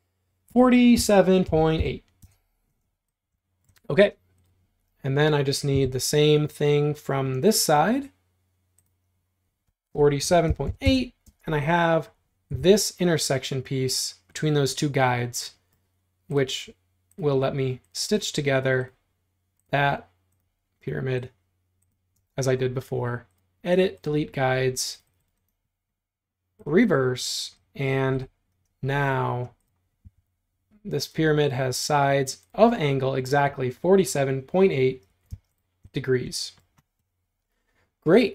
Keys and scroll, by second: 0.3-4.4 typing, 5.8 BackSpace, 9.7-11.2 typing, 12.6 l, 22.2 space, 30.1 BackSpace, 35.1 Escape, 35.3 space.